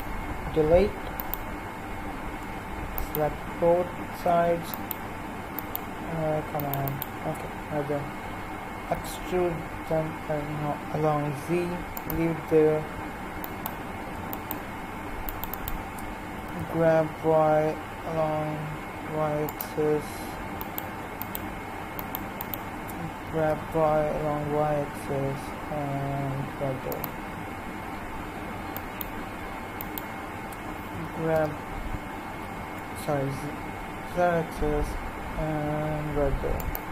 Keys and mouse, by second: 1.1-2.2 right drag, 9.0 e, 16.4 g, 20.6-25.3 right drag, 23.3 g, 28.7-34.2 right drag, 30.9 g.